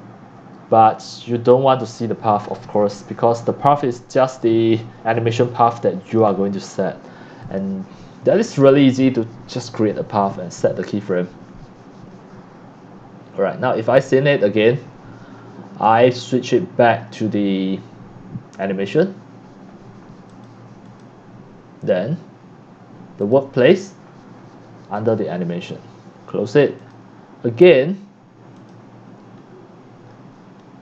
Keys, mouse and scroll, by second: 2.6-4.2 c, 4.4 click, 6.1 click, 7.4 click, 8.1-8.5 scroll up 10, 8.7 middle click, 8.8 scroll, 9.7 click, 14.3 click, 15.1 click, 16.3 click, 20.3 click, 20.8 click, 23.2 click, 25.0 click, 25.6 click, 26.8 click, 27.2 click, 28.2-28.7 drag, 30.3 click.